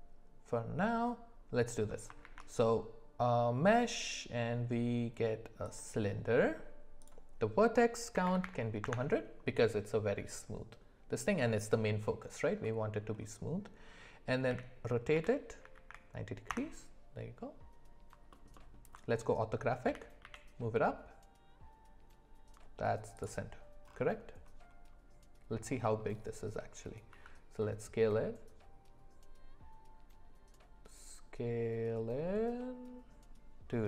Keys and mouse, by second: 2.2 shift+a, 7.0-8.9 drag, 8.4 KP_0, 12.6 middle click, 14.5 r, 18.3 alt+middle drag, 18.6 alt+middle click, 20.2 g, 27.1 s.